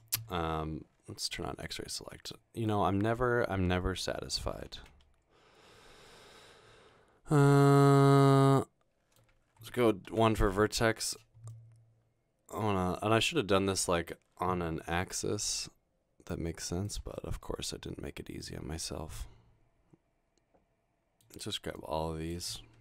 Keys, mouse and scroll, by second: 4.8-5.5 typing, 8.0-9.2 middle drag, 9.7-10.6 typing, 14.5 scroll down 1, 15.5 g, 16.9 click, 17.2 middle click.